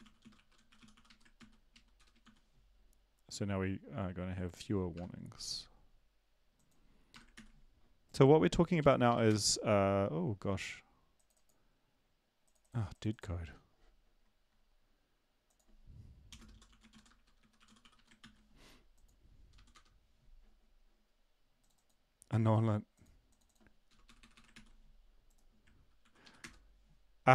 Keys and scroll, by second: 0.0-2.4 typing, 4.9 BackSpace, 7.1 BackSpace, 7.3 ctrl+s, 8.8 ctrl+l, 9.1 Up, 9.2 Return, 16.3-18.3 typing, 19.5 Up, 19.7 Return, 24.1 Delete, 24.2 Delete, 24.3 Delete, 24.5 ctrl+s, 26.0 ctrl+l, 26.2 Up, 26.4 Return.